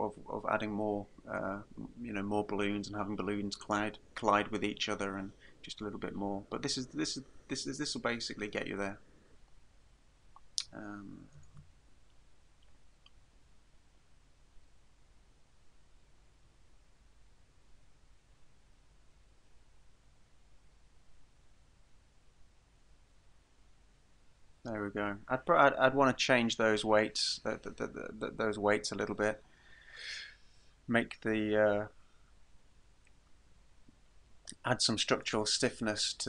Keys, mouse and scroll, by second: 11.5 alt+a.